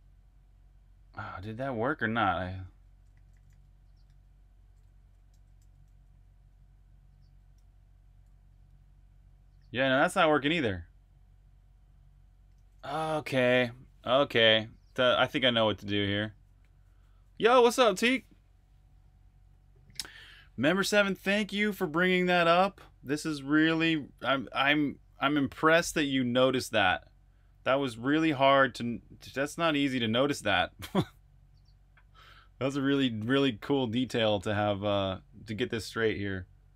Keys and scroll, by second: 1.4-8.3 typing, 12.3 super+q.